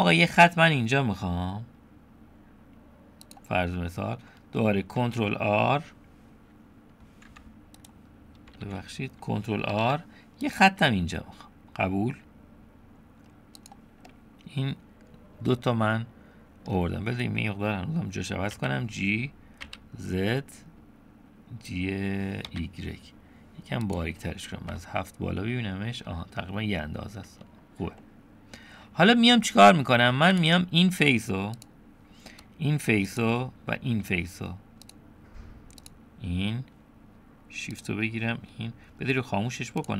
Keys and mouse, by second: 5.0 shift+r, 7.9 click, 8.6 ctrl+z, 9.7 ctrl+r, 14.1-16.7 middle drag, 18.6 g, 24.7 KP_7, 28.0-29.1 middle drag, 30.3 click, 31.6 click, 33.2 shift+click, 34.9-35.9 drag, 37.7 shift+click, 39.8 click.